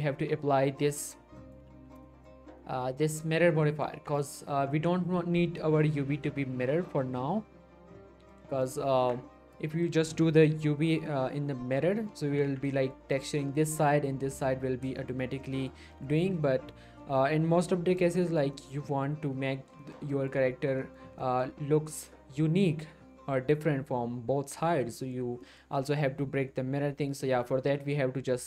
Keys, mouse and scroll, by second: 1.2 click, 1.4 middle click, 1.7 z, 2.0 middle click, 2.3 scroll up 1, 3.6 middle click, 3.9 Tab, 4.2 middle click, 6.2 middle click, 6.6 scroll up 1, 6.7-8.5 middle drag, 8.6 shift+scroll down 1, 8.6 shift+middle click, 9.0 Tab, 9.3 scroll down 1, 9.4 middle click, 12.2 scroll up 1, 12.4 Tab, 12.8 shift+middle click, 14.6 scroll down 1, 15.0 shift+middle click, 15.2 scroll up 1, 15.4 middle click, 15.9 shift+middle click, 16.0-17.8 shift+scroll up 1, 17.8 scroll down 1, 17.9 middle click, 18.1 middle click, 18.2 shift+middle click, 19.8 shift+middle click, 20.8 shift+middle click, 21.0 shift+scroll up 2, 21.2 middle click, 24.9 scroll down 1, 24.9 shift+middle click, 25.1 shift+middle click, 26.9-27.3 scroll down 1, 27.3 Tab.